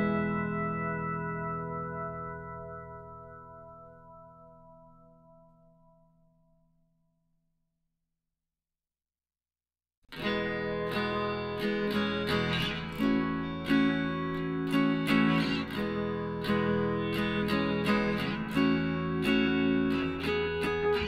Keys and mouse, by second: 1.1 g, 4.8 r, 6.6-8.0 drag, 8.4-10.0 right drag, 9.4 z, 10.6 b, 11.9 b, 13.2 r, 16.9 g, 18.7 s.